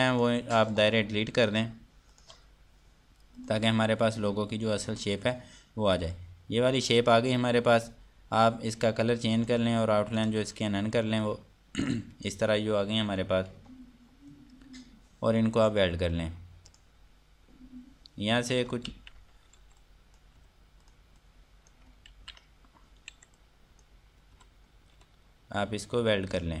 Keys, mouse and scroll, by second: 0.0 click, 0.2 Delete, 0.6 click, 0.9 Delete, 1.3 click, 1.5 Delete, 1.9 click, 2.1 Delete, 2.7 click, 2.9 Delete, 4.0 click, 4.6 scroll down 1, 5.3-6.7 scroll up 1, 9.9 click, 13.6 scroll up 1, 14.2 scroll down 1, 16.2 click, 18.0 scroll up 1, 18.8 scroll down 1, 20.4 click, 20.9 Escape, 21.4 click, 22.7 ctrl+z, 23.2 scroll down 1, 23.6 F2, 23.9 click, 24.9 Escape, 25.2 scroll down 1, 25.5 F3, 26.5 click.